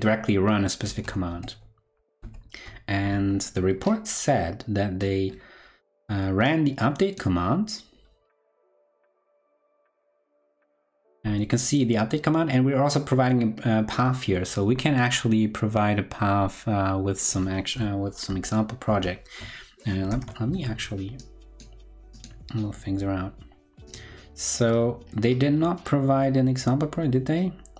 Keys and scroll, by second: 1.8 ctrl+Left, 2.2 ctrl+Left, 2.7 ctrl+Left, 11.0 ctrl+Right, 18.8 ctrl+Left, 19.4 ctrl+Left, 20.1 ctrl+Up.